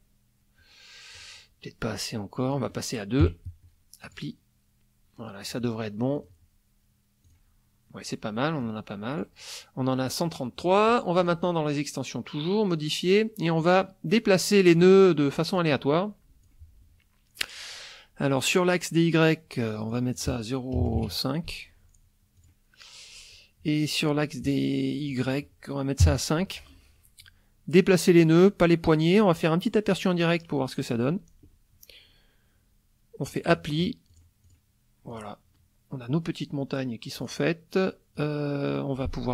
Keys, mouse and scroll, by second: 1.2 click, 2.5 click, 3.2 KP_2, 4.0 click, 6.2 click, 7.3 click, 8.6 click, 11.2 click, 14.7 click, 15.5 click, 19.9 click, 20.7 KP_0, 20.8 KP_Decimal, 20.9 KP_5, 22.4 click, 25.1 click, 26.0 KP_5, 29.9 click, 33.3 click, 34.1 click, 34.4 click, 35.1 click, 37.2 click, 38.1 click, 38.7 click.